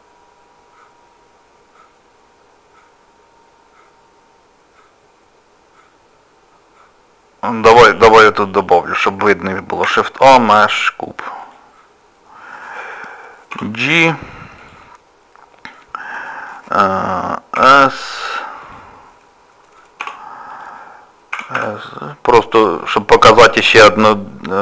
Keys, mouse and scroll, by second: 7.9 click, 9.9 shift+a, 14.9 scroll up 1, 14.9 g, 14.9 scroll down 1, 17.7 scroll up 4, 17.7 s, 20.0 g, 21.4 s, 23.4 shift+middle click.